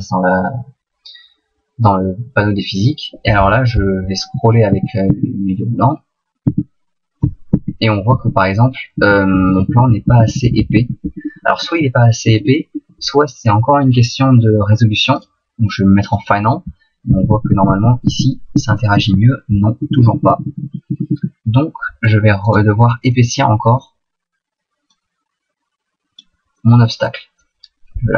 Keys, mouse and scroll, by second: 4.3 Right, 4.7 Right, 5.1 Right, 6.5 Right, 7.6 Right, 8.1 Right, 9.0 Left, 9.3 Left, 9.6 Left, 9.8 Left, 10.1 Right, 10.3 Right, 10.5 Right, 10.6 Right, 10.8 Right, 11.1 Left, 11.3 Left, 11.5 Left, 11.7 Left, 11.9 Left, 12.4 Left, 12.5 Left, 12.7 Left, 17.3 Right, 17.5 Right, 17.7 Right, 18.1 Right, 18.6 Right, 19.0 Right, 19.9 Left, 20.0 Left, 20.1 Left, 20.3 Left, 20.5 Left, 20.7 Left, 20.9 Left, 21.1 Left, 22.5 right click, 23.1 middle click, 24.9 click, 26.6 middle click, 27.9 s.